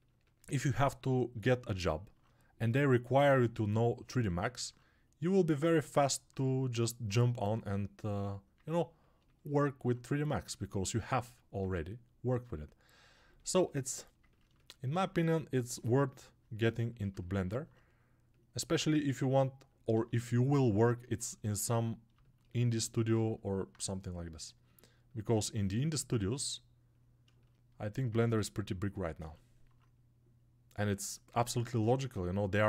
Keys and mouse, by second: 19.0 alt+q, 31.4-32.6 ctrl+alt+right drag.